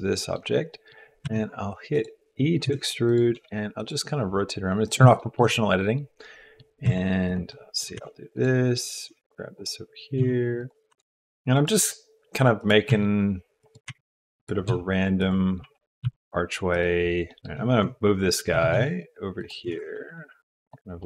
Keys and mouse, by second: 0.1 middle click, 0.7 middle click, 1.2 e, 2.7 g, 3.3 r, 4.9 click, 5.2 shift+middle click, 5.6-6.6 middle drag, 6.8 e, 7.5 click, 7.6 middle click, 7.7 click, 7.8 middle click, 7.9 r, 9.1 g, 10.2 e, 10.9 r, 11.0 e, 11.8 g, 12.9-16.0 typing, 17.3 middle click, 17.4 shift+Tab, 17.4 shift+click, 18.5 g, 19.6 r, 21.0 middle click.